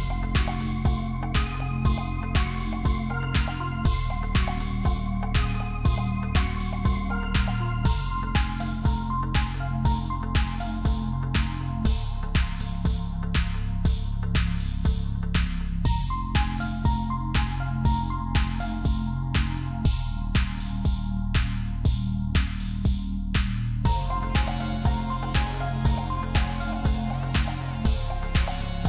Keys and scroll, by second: 0.0-0.5 typing.